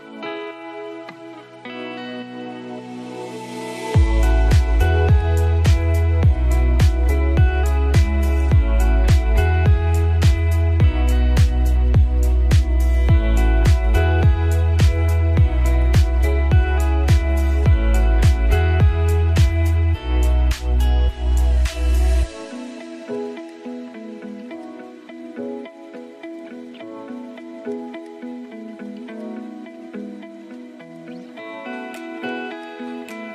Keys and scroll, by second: 8.0 ctrl+shift+[, 9.5 ctrl+shift+], 10.8 ctrl+space, 13.1 ctrl+shift+[, 14.5 ctrl+shift+], 16.8 ctrl+space, 18.0 ctrl+a, 19.4 ctrl+shift+[, 22.2 ctrl+space.